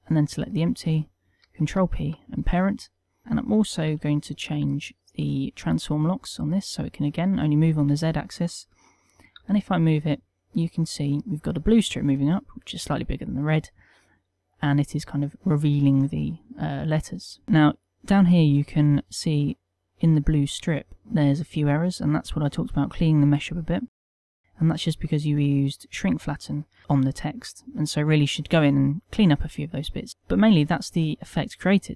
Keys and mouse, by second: 1.9 ctrl+p, 3.4 click, 4.3 n, 6.6 click, 7.1 click, 8.1 n, 9.8 g, 26.8 right click.